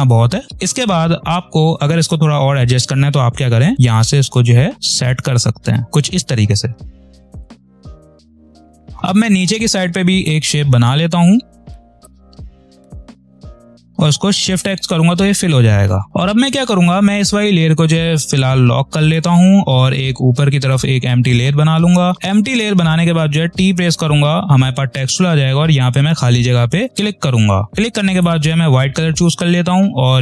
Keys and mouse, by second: 0.5 p, 3.6-5.8 ctrl+drag, 6.1 space, 7.0-8.3 ctrl+drag, 8.3 ctrl+click, 8.5 space, 8.5 click, 8.6 space, 10.1 click, 12.1 click, 13.2 ctrl+z, 13.5 click, 13.6 ctrl+click, 14.6 shift+x, 18.2 click, 23.5 t, 26.0 click, 28.1 click.